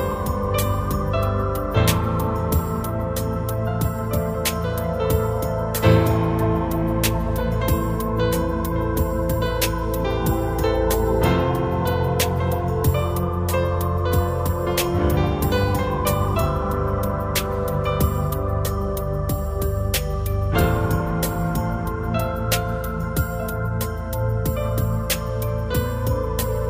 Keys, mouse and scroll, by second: 7.3 middle click, 12.2 middle click, 13.8 click, 20.9 click, 23.6 middle click.